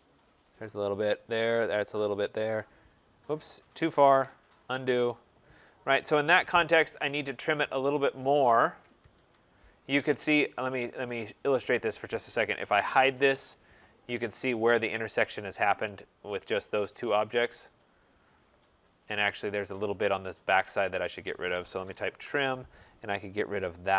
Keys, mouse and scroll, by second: 1.4 click, 2.4 click, 4.0 ctrl+z, 8.7 Escape, 9.0 Escape, 11.5 click, 12.2-13.3 typing, 14.5 click, 14.9 scroll, 15.8 Return, 16.6 right click, 17.1-18.5 scroll, 18.8-19.3 scroll, 19.1 middle click, 19.7-20.3 scroll, 20.8 click, 21.4-22.5 typing.